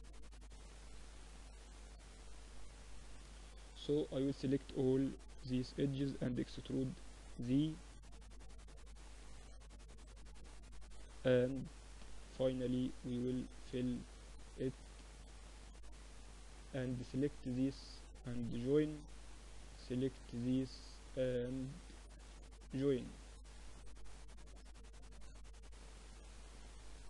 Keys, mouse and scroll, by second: 0.7-2.4 middle drag, 2.6 Tab, 5.3-9.5 middle drag, 6.3 e, 11.5 click, 12.0 f, 12.4-16.1 middle drag, 13.4 z, 15.3 z, 16.1 click, 16.5 z, 19.0 j, 20.0 z, 20.3 click, 20.7 z, 22.1-23.1 drag, 22.1 j, 22.4 z, 24.3 ctrl+r, 26.0 ctrl+r.